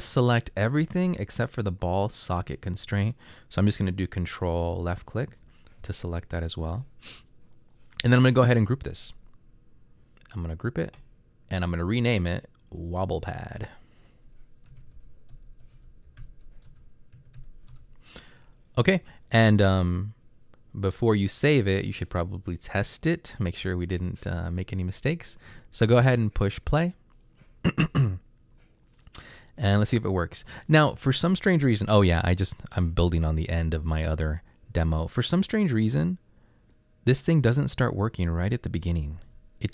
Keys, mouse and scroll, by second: 14.6-18.0 typing, 20.0-20.7 typing, 32.8 Right, 32.9 Right, 33.3 Right, 33.5 Right, 34.1 Right, 34.8 Left, 35.9 Up, 36.4 Up, 36.6 Up, 37.2 Right, 37.7 Right, 37.8 Right, 39.3 d.